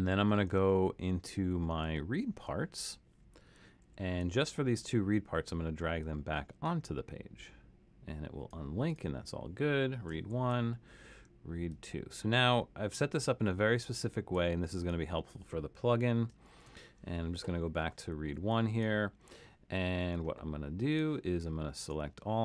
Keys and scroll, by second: 0.7 alt+super+., 1.2 alt+super+., 1.8 alt+super+., 3.8 super+=, 10.3 alt+super+., 16.5 alt+super+,, 22.3 super+a.